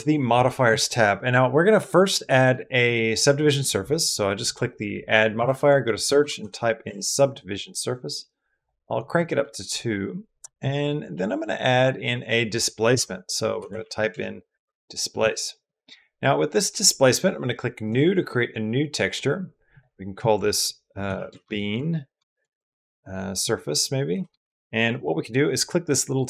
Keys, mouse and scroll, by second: 2.6 right click, 9.2-10.2 middle drag, 10.4 middle click, 11.7-14.4 drag, 17.7-20.2 drag, 20.2 shift+middle click, 21.1-22.1 drag, 22.1 shift+middle click, 22.3 click, 23.4 click, 24.1-26.2 shift+middle drag.